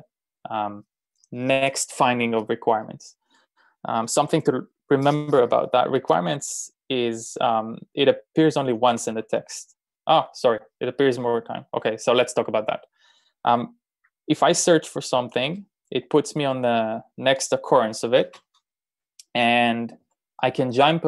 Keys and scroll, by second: 9.0 typing, 15.2 b, 16.0 b, 19.4-20.5 typing.